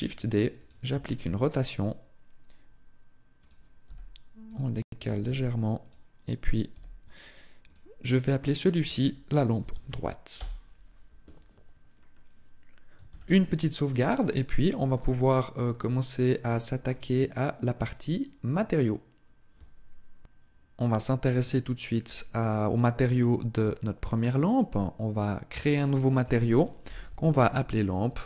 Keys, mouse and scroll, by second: 0.4 click, 0.8 r, 3.3 click, 3.6 g, 4.4 click, 4.8 r, 5.6 click, 6.8 click, 6.8 g, 7.6 click, 11.6-12.3 scroll down 2, 12.8 ctrl+s, 13.9 shift+middle click, 15.0-15.4 scroll down 1, 15.4 middle click, 16.2 shift+middle click, 16.8 scroll up 1.